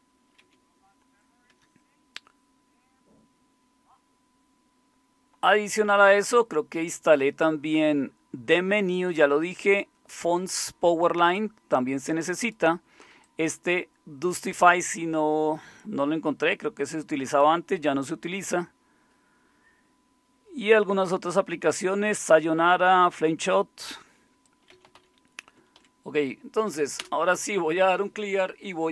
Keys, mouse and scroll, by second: 0.4 c, 24.5-26.3 typing, 27.0 Return.